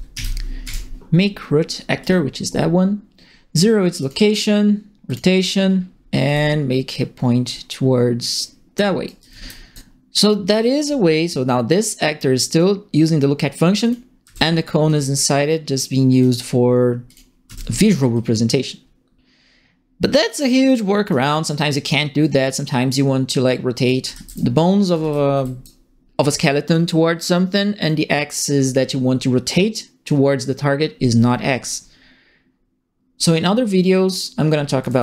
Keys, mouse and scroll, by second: 0.0-1.1 typing, 2.0 click, 4.0 click, 5.0 click, 6.2 e, 6.9-8.7 drag, 9.0-9.7 typing, 9.0 right click, 11.7 click, 13.8 click, 14.2 w, 14.8-16.2 drag, 17.0 click, 17.4 w, 18.1-21.1 drag, 22.2 click, 23.7-25.8 typing, 23.8 right click, 24.8 right click, 34.6-35.0 typing, 34.8-35.0 right drag.